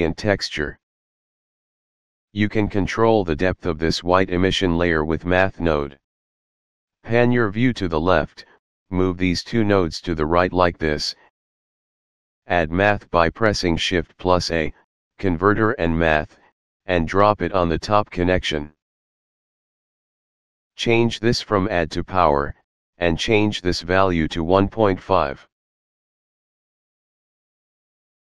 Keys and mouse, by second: 3.8 shift+middle click, 8.4 click, 10.1 click, 16.6 click, 17.8 click, 19.8 click, 21.7 click, 23.3 click, 24.3 KP_1, 24.6 KP_Decimal, 25.0 KP_5, 25.5 Return, 27.2 shift+middle click, 27.9 shift+middle click.